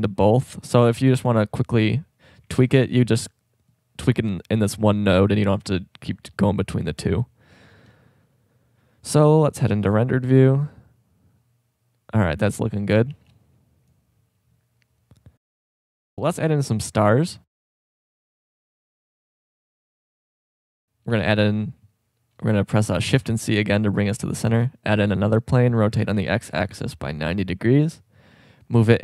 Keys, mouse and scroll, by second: 3.9-5.2 drag, 8.6-9.7 middle drag, 9.8-10.1 drag, 10.3 click, 11.0 click, 13.1 shift+b, 17.6 z, 18.8-20.1 middle drag, 21.1 shift+a, 23.0 shift+c, 24.5 shift+a, 25.7 r.